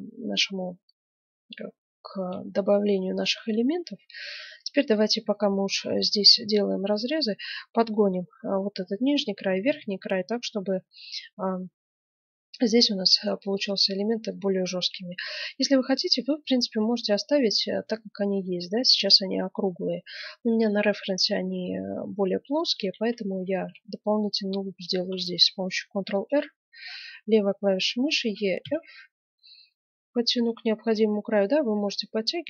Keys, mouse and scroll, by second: 1.8-3.6 middle drag, 5.3-6.7 middle drag, 7.1-8.8 middle drag, 9.0-10.8 middle drag, 11.2-13.1 middle drag, 14.2-16.7 middle drag, 16.7 Tab, 19.6-21.4 middle drag, 22.5 middle click, 22.9 Tab, 22.9 click, 23.2-24.9 middle drag, 24.9 ctrl+r, 24.9 click, 25.4 click.